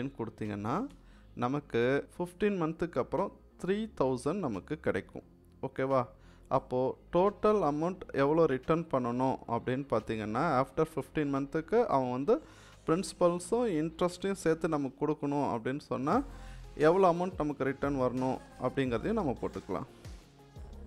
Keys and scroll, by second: 0.8 Return, 20.1-20.8 typing.